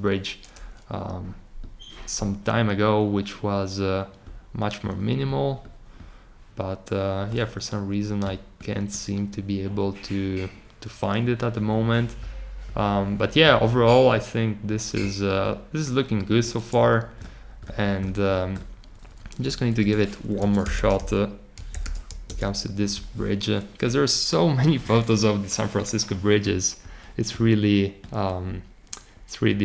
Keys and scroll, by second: 20.3-21.8 typing.